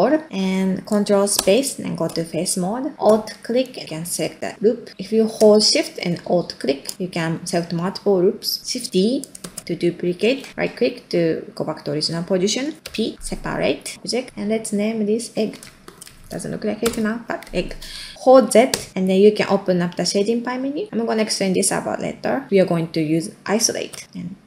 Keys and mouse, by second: 1.3 ctrl+space, 2.5 middle click, 3.6 alt+click, 4.0 middle click, 6.6 alt+shift+click, 7.0 middle click, 8.4 middle click, 9.4 shift+d, 13.9 p, 15.5-24.4 shift+drag.